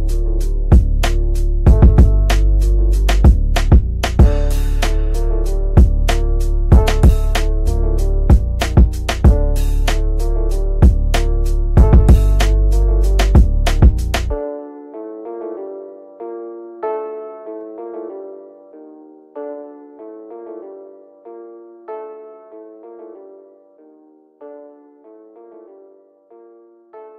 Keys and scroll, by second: 0.0 Escape, 23.2 F3, 25.1 4, 25.3 Return.